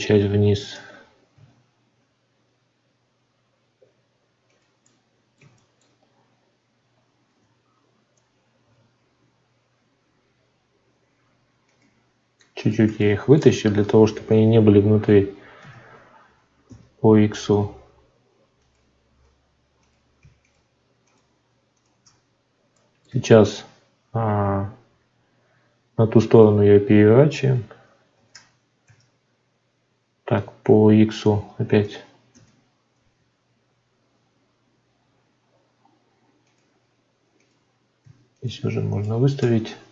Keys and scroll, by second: 0.5 shift+d, 1.2 z, 28.1 shift+d, 28.8 z.